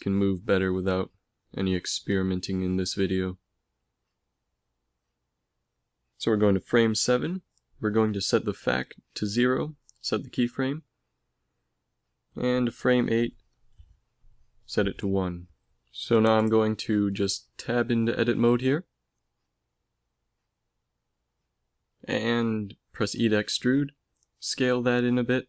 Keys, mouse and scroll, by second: 3.8-5.5 drag, 5.9-7.8 middle drag, 7.8-9.8 drag, 9.8-11.2 middle drag, 9.8 i, 11.2 Right, 13.2 click, 14.9 i, 17.0 ctrl+s, 19.7 Tab, 21.7 e, 22.8 s.